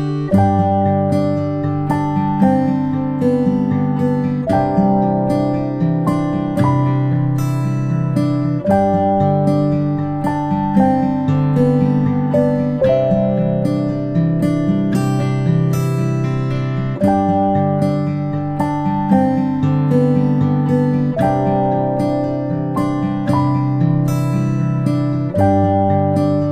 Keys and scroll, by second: 2.0 ctrl+space, 8.1 ctrl+z, 13.2-13.6 space, 14.4 space, 14.9 space, 24.5 ctrl+Delete.